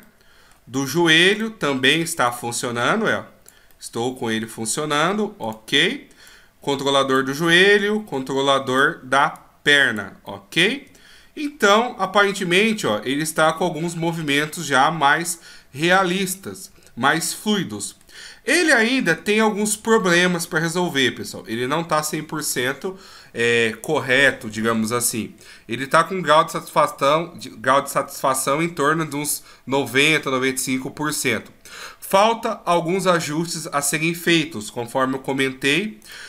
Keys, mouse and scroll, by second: 0.0 middle click, 1.3 right click, 2.3 click, 3.7 middle click, 5.4 right click, 6.3 click, 7.6 scroll down 1, 7.7 middle click, 8.7 right click, 9.3 click, 10.2 middle click, 11.0-12.0 shift+scroll up 6, 12.0 middle click, 15.1 middle click, 18.8-19.7 shift+scroll down 1, 19.7-22.0 shift+scroll up 3, 36.0 right click.